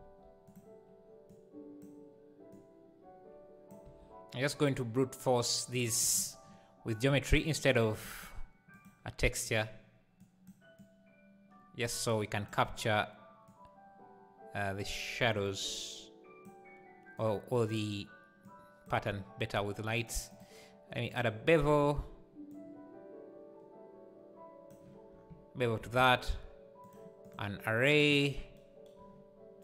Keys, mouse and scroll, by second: 1.3 click, 2.5 click, 3.8 g, 8.8-13.8 drag, 17.2 click, 18.5 click, 21.2-28.3 drag, 28.3 scroll down 3.